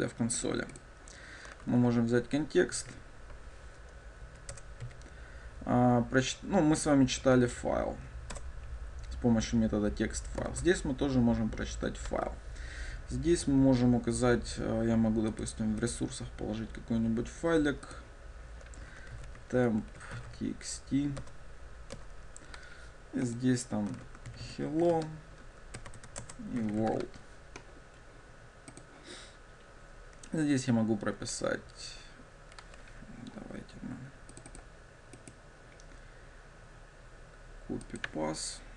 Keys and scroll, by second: 4.7 Return, 38.1 ctrl+shift+super+c.